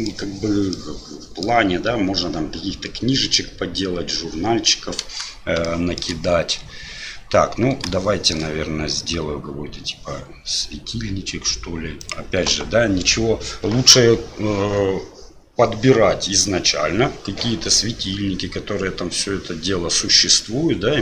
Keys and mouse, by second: 0.8-4.9 middle drag, 5.6-6.0 shift+middle drag, 8.0-8.3 shift+middle drag, 12.0-21.0 middle drag.